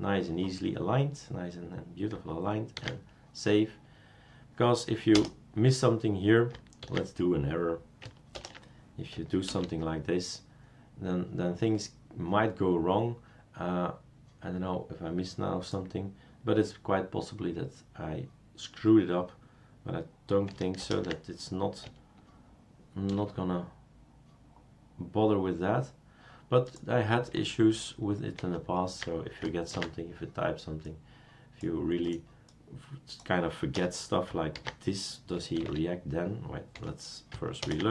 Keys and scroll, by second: 2.8 ctrl+s, 5.1 BackSpace, 6.8 ctrl+s, 8.3 ctrl+shift+BackSpace, 9.5 super+space, 20.8 ctrl+shift+BackSpace, 23.1 super+space, 28.4 ctrl+z, 29.7 ctrl+s, 33.7 BackSpace, 34.5 ctrl+s, 35.6 super+space, 36.7 Escape, 37.6 ctrl+shift+BackSpace.